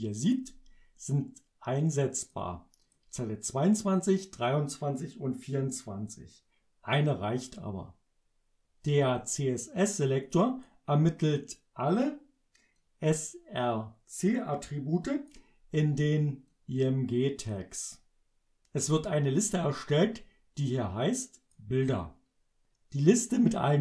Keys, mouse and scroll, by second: 2.9 click, 9.4-10.9 drag, 12.8-15.5 drag, 16.6-17.7 drag, 20.8 click.